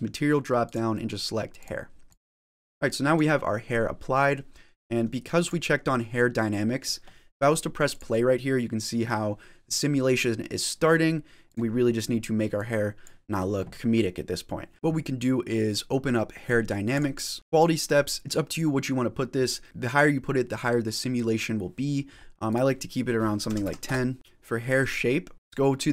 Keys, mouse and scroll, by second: 0.5 click, 2.0 click, 2.5 middle click, 5.3 click, 7.8 click, 11.5 click, 12.5 click, 13.8 middle click, 16.8 click, 22.4 click, 24.1 click, 24.6 click.